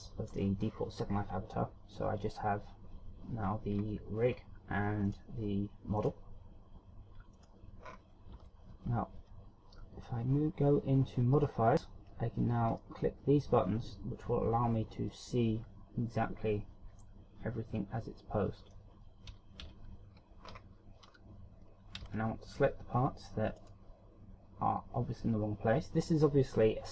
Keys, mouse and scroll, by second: 0.0 click, 0.4 click, 3.9 scroll down 3, 5.2 right click, 6.2 right click, 7.5 right click, 8.1-8.8 scroll up 4, 8.6 Tab, 11.6 click, 13.0 click, 15.3 click, 17.3 middle click, 19.9 KP_1, 22.4 scroll up 2, 22.4 z, 23.8 right click.